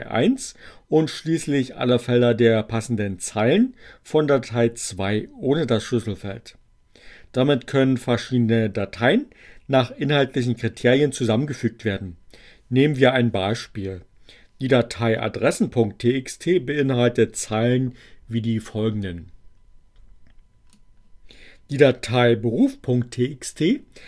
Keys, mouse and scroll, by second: 19.0-20.9 drag.